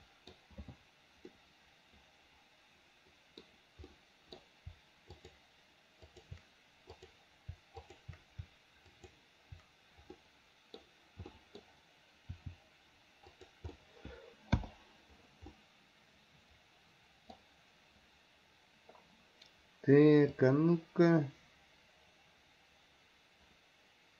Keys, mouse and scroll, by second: 1.4-3.5 middle drag, 3.9 middle drag, 4.1-4.5 middle drag, 5.2 shift+click, 6.1 shift+click, 7.0 click, 7.9 shift+click, 9.0 shift+click, 10.2-10.8 middle drag, 11.4 middle drag, 12.4 r, 13.8-14.3 middle drag, 14.3 a, 14.7 i, 15.6-17.5 middle drag, 20.4-24.1 drag.